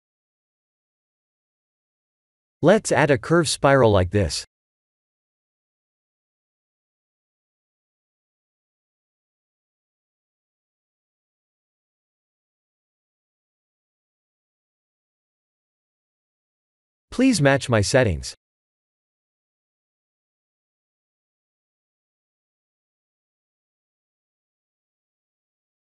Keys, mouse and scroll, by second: 0.5 KP_1, 2.2 middle click, 2.9 click, 4.4 shift+a, 17.1 click, 24.9 shift+click, 25.1 shift+click.